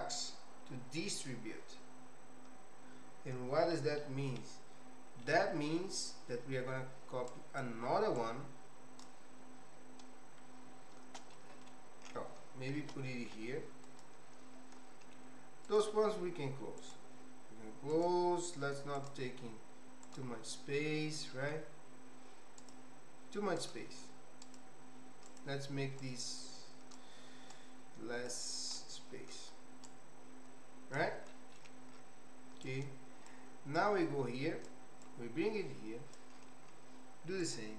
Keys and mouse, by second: 3.7 middle click, 5.3 middle click, 7.4 click, 8.3 click, 11.3 middle click, 12.8 shift+d, 19.2 click, 21.3 middle click, 22.8 click, 25.5 click, 26.0-27.1 drag, 27.6 click, 28.8 click, 30.0-31.1 drag, 31.3 middle click, 32.8 click, 33.8 click, 35.0-36.3 drag, 37.6 click.